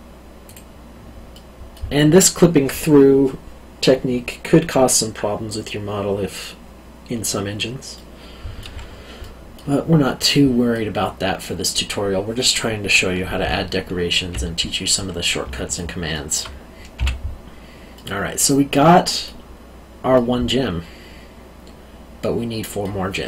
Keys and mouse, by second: 0.4 click, 1.3 middle click, 7.9 middle click, 13.4 Tab, 14.9 middle click, 15.4 alt+middle click, 16.9 o, 17.1 q, 17.9 middle click, 20.1 middle click.